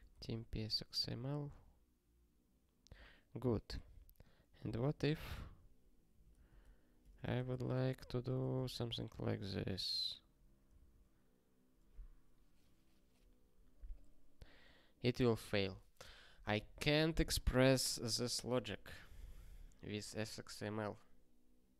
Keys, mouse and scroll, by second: 0.0-0.3 typing, 0.4 ctrl+e, 4.2 click, 4.6 Return, 4.9-8.2 typing, 8.7 ctrl+alt+x, 9.2 ctrl+n, 9.4 ctrl+n, 10.7 ctrl+alt+x.